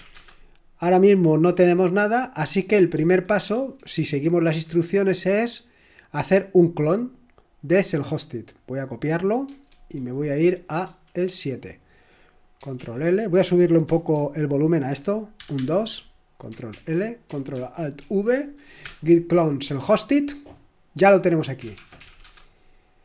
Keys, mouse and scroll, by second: 0.1 Return, 2.9 super+2, 3.5 super+1, 4.4 super+8, 7.3-8.3 drag, 8.3 middle click, 9.0 click, 9.7 super+1, 10.8 super+7, 12.8 ctrl+l, 15.4 ctrl+alt++, 15.6 ctrl+alt++, 21.6-22.2 typing.